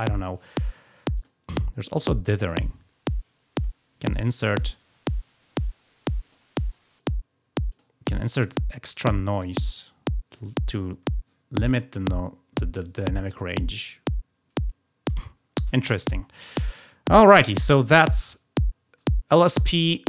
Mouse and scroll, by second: 1.1 click, 2.4 click, 3.5 click, 4.3 click, 6.2 click, 6.9 click, 7.7 click, 8.4 click, 9.3 click, 10.2 click, 18.0 click.